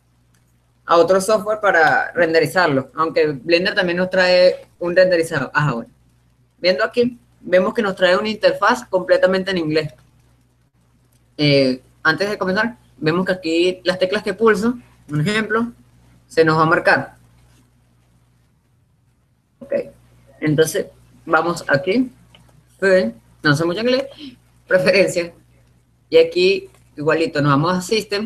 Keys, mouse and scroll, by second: 15.9 h, 19.0 ctrl+z, 22.9-24.2 drag.